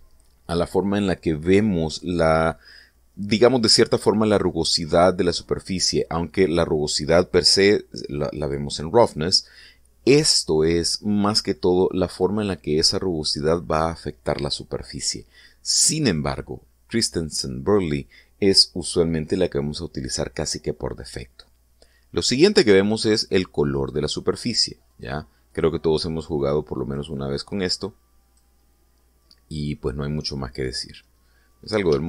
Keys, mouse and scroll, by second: 10.7 click, 12.3 click, 23.0 click, 24.3 click, 25.5 click, 26.1 click, 27.4-29.2 drag, 30.4 middle click, 31.3-31.8 scroll up 2.